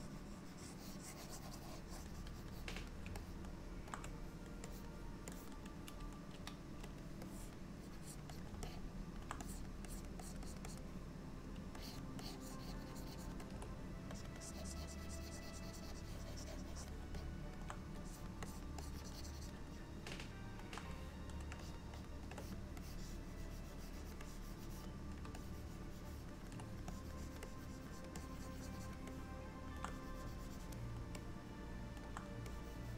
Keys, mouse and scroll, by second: 3.2 shift+middle click, 4.8 click, 5.4 click, 6.4 f, 7.3 click, 7.9 click, 8.1 click, 8.4 click, 8.7 alt+middle click, 9.5 click, 9.9 click, 10.3 click, 10.5 click, 10.7 click, 11.8 ctrl+click, 12.3 ctrl+click, 13.0 ctrl+click, 13.5 ctrl+click, 14.2 click, 14.5 click, 15.2 click, 17.2 alt+middle click, 18.1 click, 18.5 click, 18.9 click, 19.1 click, 19.8 alt+middle click, 21.7-22.0 shift+click, 22.0 shift+click, 22.0 click, 22.4 click, 22.9 click, 24.3 click, 25.5 ctrl+click, 26.6 ctrl+click, 27.0 click, 27.3 click, 27.5 click, 28.0 click, 28.2 click, 29.2 middle click, 30.0 click, 31.3 middle click, 32.6 click.